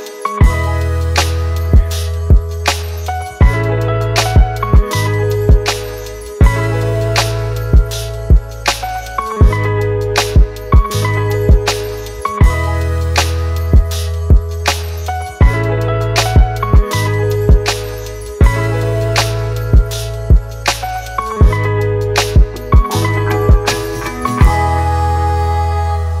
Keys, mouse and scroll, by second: 1.4 typing, 2.3 double click, 8.5 double click, 8.9-10.4 typing, 10.9 double click, 15.4-16.0 typing, 16.3 double click.